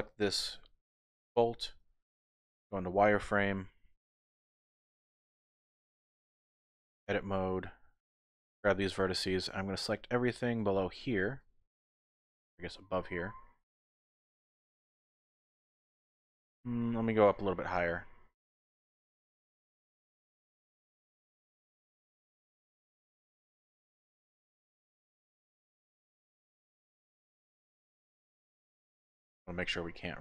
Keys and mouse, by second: 0.4 KP_1, 1.5 shift+click, 1.9 z, 7.0 Tab, 7.3 1, 8.6-10.6 drag, 11.9 shift+click, 15.4 c, 25.8 click, 27.0 middle click, 27.7 z, 28.1-30.2 middle drag.